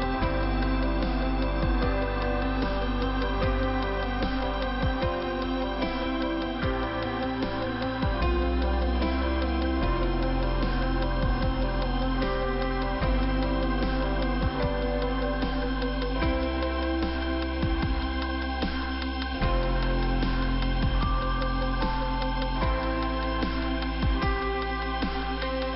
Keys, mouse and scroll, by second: 3.7 alt+f, 4.4 middle click, 5.1-5.8 scroll up 1, 5.8 scroll up 1, 6.1 click, 11.4 middle click, 12.4 middle click, 17.6 middle click, 18.7 middle click, 19.2-20.0 scroll up 1, 20.0 click, 20.5 click, 21.9 click, 23.3 click, 25.0 click.